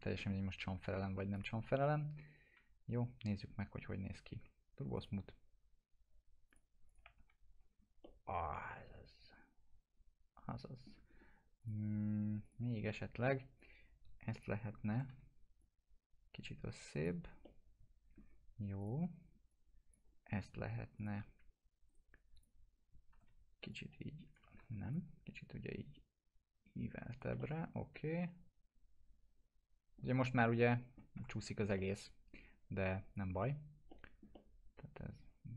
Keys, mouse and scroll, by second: 1.3 click, 2.6 t, 5.0 click, 7.2 F4, 7.6 scroll down 1, 8.0-11.2 alt+middle drag, 11.2-11.6 scroll up 1, 11.6 click, 12.9-13.5 alt+middle click, 13.6-14.5 click, 14.7 scroll up 1, 14.9 e, 15.6-17.2 drag, 17.4-18.4 alt+middle drag, 18.8-20.1 drag, 21.9 right click, 22.4 click, 22.9-23.8 typing, 23.7-24.6 click, 24.6 ctrl+z, 24.9-30.2 drag, 27.4-30.6 alt+middle drag, 30.6-31.2 alt+middle click, 31.2 F4, 31.8-32.4 alt+middle drag, 34.3-35.5 alt+middle drag.